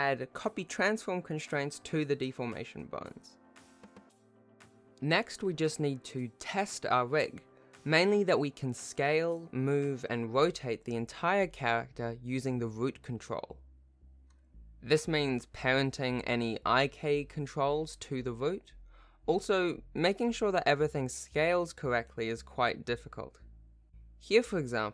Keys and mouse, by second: 0.2 alt+a, 0.8 ctrl+shift+h, 0.9 ctrl+alt+shift+a, 1.1 ctrl+alt+shift+a, 1.1 shift+click, 1.2 ctrl+s, 1.8 ctrl+shift+click, 1.8 alt+a, 1.8 ctrl+shift+click, 2.0 ctrl+s, 2.3 ctrl+shift+h, 2.4 alt+a, 2.5 alt+a, 2.8-6.3 typing, 3.7 shift+middle click, 3.9 shift+middle click, 4.3 ctrl+alt+shift+a, 4.4 ctrl+Tab, 4.5 ctrl+Tab, 5.1 shift+click, 5.8 alt+a, 7.4 shift+middle click, 8.0 shift+middle click, 8.3 a, 8.8 alt+g, 9.1 alt+r, 10.3 click, 11.3 shift+middle click, 12.8 alt+a, 13.7 s, 15.2 ctrl+Tab, 15.5 ctrl+p, 16.5 alt+a, 17.1 s, 18.1 shift+click, 19.0 ctrl+p, 19.6 alt+a, 20.6 ctrl+Tab, 21.6 shift+click, 24.0 Tab.